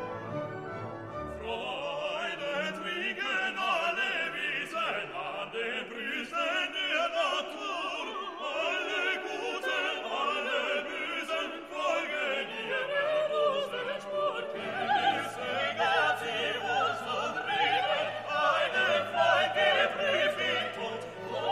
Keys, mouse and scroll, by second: 0.3 0, 1.4 click, 2.0-2.7 scroll down 1, 2.8 scroll down 2, 3.4-4.0 scroll down 2, 4.5 click, 5.9 click, 8.1 click, 10.5 click, 13.6 click, 14.6 click, 15.5 click, 16.5 3, 17.6 5, 19.5 click, 20.0 click, 20.5-20.9 scroll down 1.